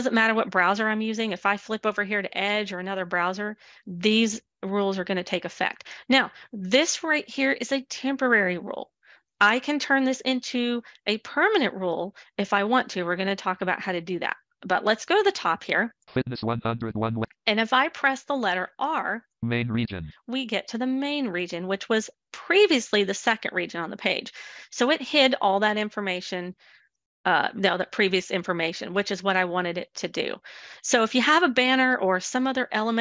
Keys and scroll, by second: 17.7 r.